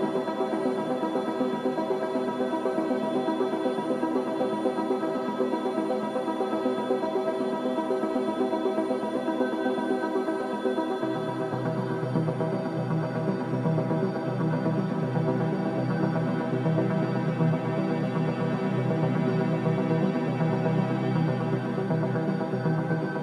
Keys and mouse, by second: 0.4-1.0 ctrl+middle drag, 1.2 middle click, 3.2 middle click, 3.9 middle click, 4.6 shift+middle click, 9.7 ctrl+s, 19.2 click, 20.1 ctrl+s, 21.4 click, 22.2 Tab, 22.8 Tab.